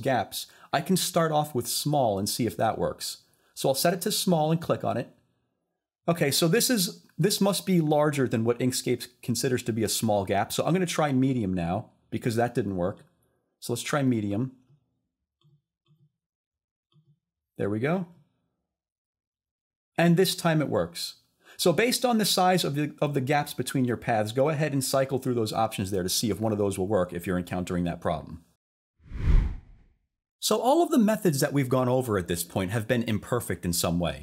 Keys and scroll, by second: 29.5 s.